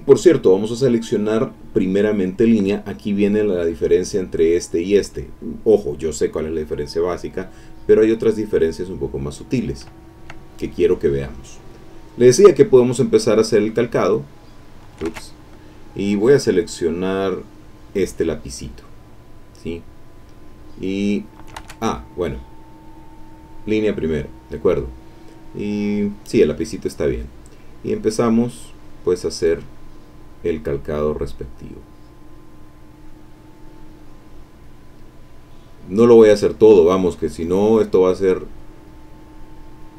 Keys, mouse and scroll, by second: 4.3 click, 4.7 click, 5.6 click, 7.7 click, 8.6 click, 8.8 middle click, 9.5 middle click, 10.0 ctrl+click, 10.5 ctrl+middle click, 14.0 click, 15.1 ctrl+z, 17.4 click, 19.4-21.6 drag, 21.6 ctrl+z, 22.1 ctrl+click, 23.7 click, 24.1 click, 28.3-29.6 drag, 30.0 click, 31.0-32.5 drag, 33.0 click, 34.0 click, 35.5-36.5 drag, 36.7-38.0 drag, 38.2 click, 39.5 click.